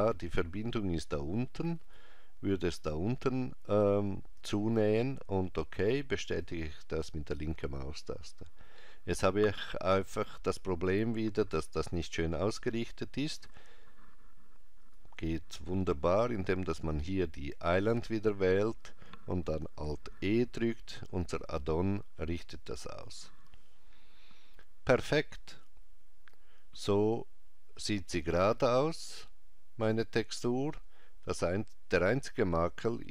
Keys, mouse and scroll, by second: 6.4 click, 14.8 click, 16.9 click, 20.5 alt+e.